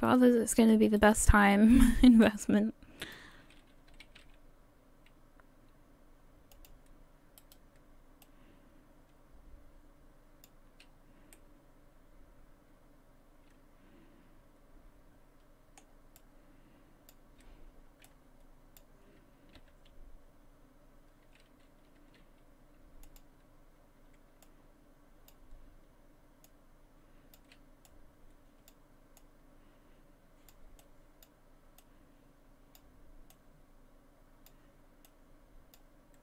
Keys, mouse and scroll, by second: 1.0 shift+right click, 1.7 shift+right click, 2.3 shift+right click, 3.0 shift+right click, 3.9 s, 7.4 right click, 8.2 click, 10.9-11.3 scroll down 2, 11.3 middle click, 16.2 click, 18.1 click, 19.6 g, 24.4 click, 26.5 click, 27.9 click, 29.2 click, 30.8 click, 31.8 click, 33.3 click, 35.1 click.